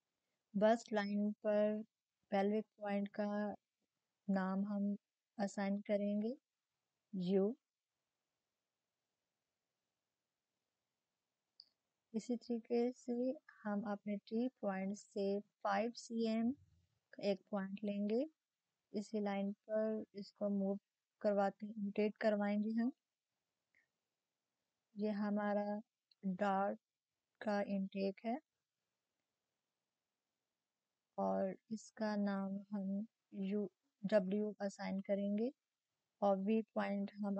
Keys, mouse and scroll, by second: 3.9 click, 6.4-9.9 drag, 9.9-10.4 typing, 10.0 click, 10.4 shift+click, 11.4 ctrl+shift+m, 14.3-15.7 drag, 18.3 click, 18.3 click, 22.0 click, 25.2-31.9 drag, 31.1-31.9 typing, 33.2-35.6 drag.